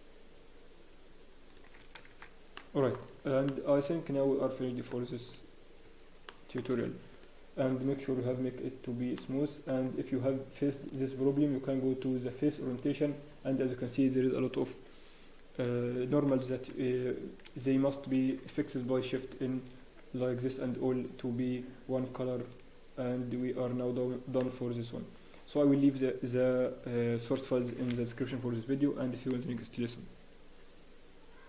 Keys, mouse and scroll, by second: 2.2 shift+z, 2.5 middle click, 3.2 Tab, 3.2 scroll down 1, 3.4 middle click, 5.0-5.6 scroll down 2, 6.2 shift+middle click, 7.1 right click, 9.1 middle click, 10.8 click, 17.4 Tab, 17.4 a, 18.6 a, 19.2 shift+n, 19.8 Tab, 22.5 click, 24.4 middle click.